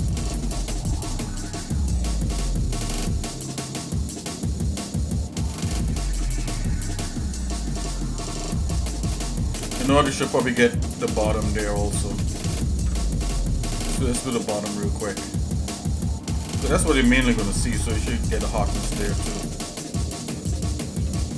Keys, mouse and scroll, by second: 0.4 shift+middle click, 1.9 shift+middle click, 2.4 middle click, 3.1 shift+middle click, 4.5 shift+middle click, 6.0 ctrl+Tab, 8.3 shift+middle click, 9.5-9.9 scroll up 2, 10.3 scroll up 1, 10.8 ctrl+Tab, 12.2 click, 12.7 ctrl+Tab, 15.1 click, 15.8 alt+shift+click, 17.5 ctrl+b, 20.5 shift+middle click, 21.2 scroll down 2.